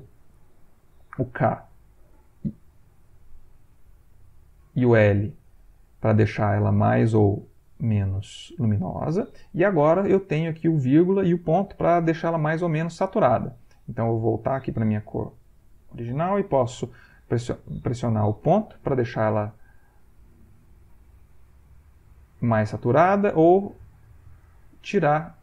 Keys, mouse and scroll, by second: 2.7 click, 3.6 k, 4.2 click, 5.1 l, 5.9 click, 6.8 l, 7.1 click, 7.7 l, 7.9 click, 13.2 ., 15.6 ctrl+click, 17.2 l, 18.7 ., 18.9 click, 20.0 ., 20.3 click, 21.0 ., 21.8 click, 22.5 ,, 23.0 click, 23.7 click, 24.1 ,, 24.4 click, 25.2 click.